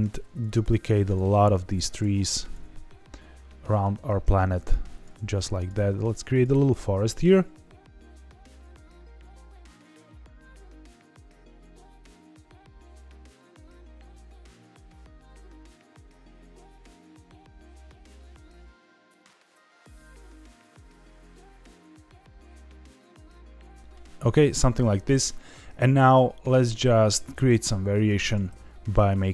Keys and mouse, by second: 0.0 alt+d, 0.4 click, 0.6 alt+d, 1.0 click, 1.3 alt+d, 1.7 click, 2.0 alt+d, 2.3 click, 2.7-3.8 middle drag, 4.9 click, 5.1 alt+d, 5.5 click, 5.7 alt+d, 6.3 click, 6.6 alt+d, 7.1-7.9 drag, 8.1 middle drag, 8.5 click, 8.6 alt+d, 8.7 click, 8.8 alt+d, 9.0 click, 9.2 alt+d, 9.4 click, 9.5 alt+d, 9.7 click, 9.8-10.8 middle drag, 10.8 alt+d, 11.1 click, 11.1 alt+d, 11.3 click, 11.4 alt+d, 11.5 click, 11.6 alt+d, 11.7 click, 11.8 alt+d, 12.0 click, 12.4 click, 12.5-13.1 middle drag, 13.3 alt+d, 13.5 click, 13.6 middle click, 13.7 alt+d, 13.9 click, 14.0 alt+d, 14.1 click, 14.2 alt+d, 14.3 click, 14.4 alt+w, 15.0 click, 15.1 middle click, 15.5 g, 15.8 click, 15.9 alt+d, 16.4 click, 16.5-17.4 middle drag, 17.9 alt+d, 18.2 click, 18.2 alt+d, 18.4 click, 18.5 middle click, 18.6 alt+d, 18.9 click, 19.2 click, 19.4 click, 19.5 alt+d, 19.6 click, 19.7 middle drag, 20.1 click, 20.2 middle drag, 20.5 middle click, 20.8 alt+d, 21.1 click, 21.2 alt+d, 21.4 click, 21.4 alt+d, 21.9 click, 22.0 middle drag, 22.3 alt+d, 22.4 click, 22.5 alt+d, 22.6 click, 22.7 alt+d, 22.8 click, 23.0 alt+d, 23.2 click, 23.3-23.9 middle drag, 24.5 shift+middle click, 28.2 click, 28.4 s, 28.9 click.